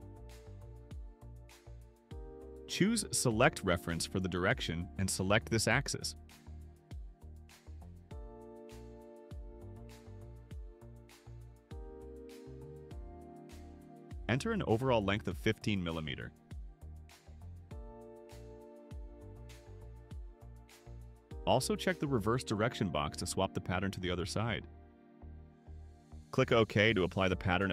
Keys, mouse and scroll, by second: 3.3 click, 6.5 click, 8.1 click, 15.1 click, 16.4 1, 16.7 5, 19.0 click, 22.5 click, 26.8 click, 27.4 click.